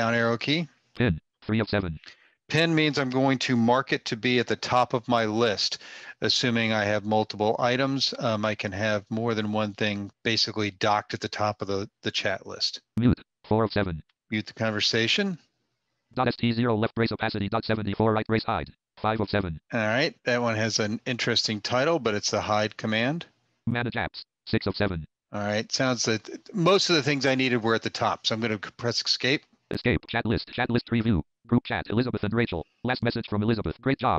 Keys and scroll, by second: 28.4 Escape, 30.0 Escape.